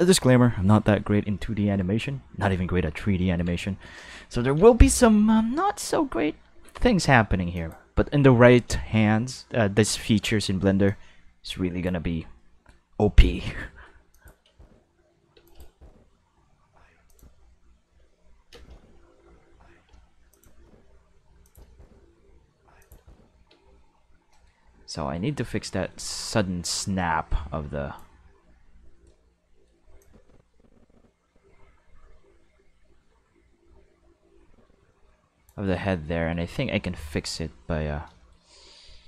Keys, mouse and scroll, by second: 2.1-3.5 ctrl+middle drag, 3.6 shift+middle click, 4.1 ctrl+middle click, 6.6 space, 6.9 space, 7.5 click, 10.8 click, 12.3 middle click, 12.9 middle click, 13.8 middle click, 14.1 click, 14.4 space, 15.3 space, 15.4 click, 15.6 space, 16.9 space, 17.1 click, 17.9 q, 18.5 space, 19.8 space, 20.3 click, 20.5 space, 21.3 space, 21.4 click, 21.6 space, 22.7 space, 22.8 click, 22.9 space, 23.5 space, 24.3 middle click, 25.8 middle click, 26.2-27.9 drag, 29.0 middle click, 30.0-35.4 drag, 36.2 middle click, 36.8 q.